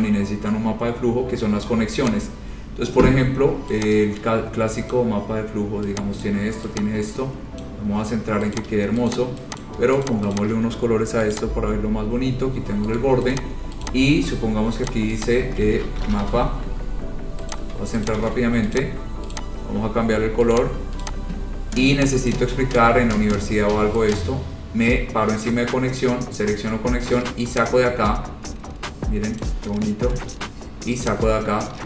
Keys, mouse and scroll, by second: 1.9 click, 2.3 click, 5.1 click, 6.4 click, 7.8 click, 8.8 click, 9.3 click, 9.8 click, 10.2 shift+click, 10.3 shift+click, 10.6 click, 10.8 shift+click, 11.5 click, 13.2 right click, 13.5 click, 14.0 click, 15.1 click, 15.4 click, 16.0-16.9 typing, 17.8 click, 18.1-18.9 typing, 18.3 shift+click, 18.4 shift+click, 19.0 click, 19.5 click, 20.7 click, 21.2 click, 22.0 space, 22.5 click, 26.2 click, 29.6 click.